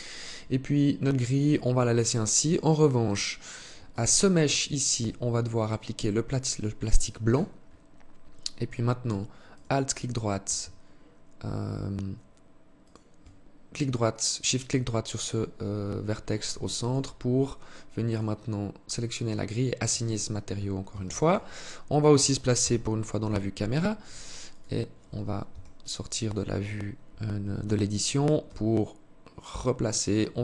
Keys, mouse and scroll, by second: 3.0 alt+right click, 3.7 alt+shift+right click, 4.7 click, 6.0 click, 8.6 alt+right click, 11.9 shift+right click, 15.7 alt+shift+click, 17.3 click, 18.5 click, 20.0 ctrl+s, 21.7 KP_0, 23.5 right click, 24.5 Tab, 25.3 right click, 27.5 g.